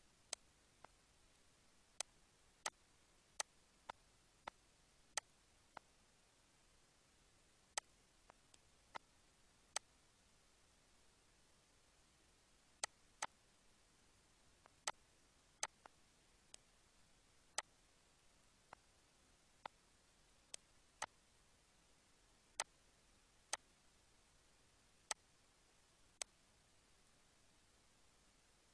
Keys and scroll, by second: 8.5 Delete, 18.1 Delete, 21.9 Delete, 27.4 ctrl+z.